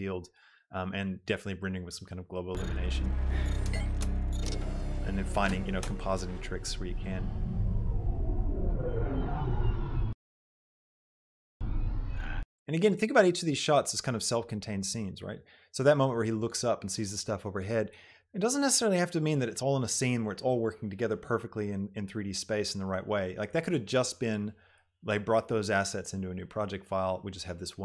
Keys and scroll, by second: 2.8 space, 10.1 space, 12.7 space.